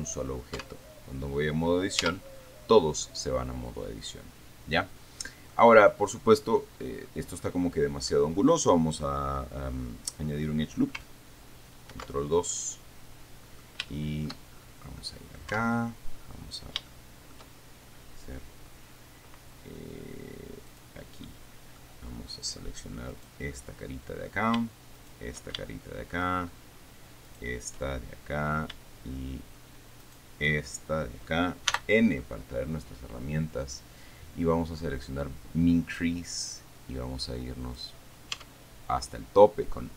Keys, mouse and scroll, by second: 0.9 Tab, 2.3 Tab, 3.3-6.0 middle drag, 6.2 scroll down 1, 6.5 middle click, 7.3-7.7 scroll down 1, 7.7 middle click, 12.2 ctrl+2, 12.8-14.7 middle drag, 14.7-15.2 shift+scroll up 1, 15.2 click, 15.8 Tab, 17.1 shift+middle click, 21.0 click, 21.5 middle click, 23.4 right click, 23.8 middle click, 25.2 shift+middle click, 25.6 shift+right click, 25.9 shift+middle click, 27.5 shift+middle click, 28.1 shift+middle click, 30.3 shift+right click, 31.0-31.7 shift+scroll down 3, 32.0 n, 36.0-38.7 drag, 38.6 Tab, 39.1-39.5 scroll down 1, 39.5-39.9 middle drag.